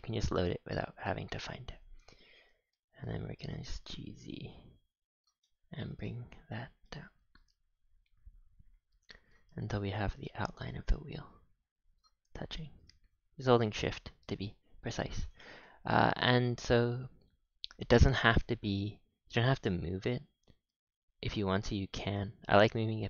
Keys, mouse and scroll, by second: 0.4-1.1 scroll down 4, 1.1 scroll up 4, 1.3 scroll, 2.7-3.1 shift+middle drag, 5.4 shift+middle click, 6.0-6.5 middle drag, 6.8-7.2 middle drag, 14.5-15.2 scroll down 6, 15.2 click, 15.6 shift+middle click, 15.9-16.3 scroll down 4, 17.5-18.0 scroll up 2, 19.3 g, 21.3 middle drag, 21.5 g.